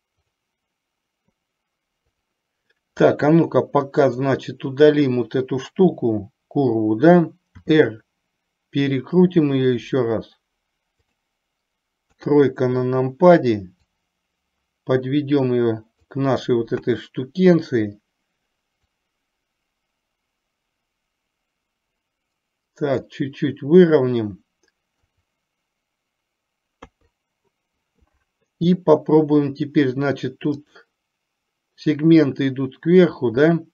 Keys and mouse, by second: 0.4 click, 2.2 click, 4.3 click, 6.0 KP_7, 7.7 r, 12.2 KP_3, 14.2-16.2 drag, 16.9 KP_1, 18.9 click, 19.9-23.2 drag, 25.0 KP_4, 26.9 KP_3, 30.7 click.